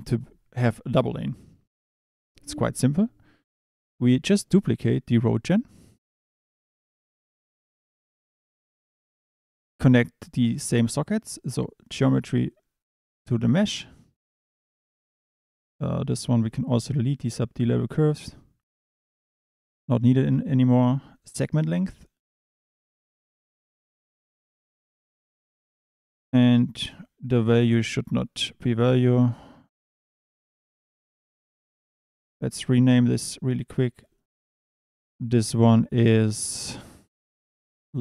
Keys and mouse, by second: 3.7 click, 5.2 shift+d, 7.3 click, 11.3 click, 16.4 click, 18.7 click, 19.5 click, 21.7 click, 26.3 click, 27.9 click, 31.7 Tab, 32.7 click, 33.9 click, 34.2-38.0 drag.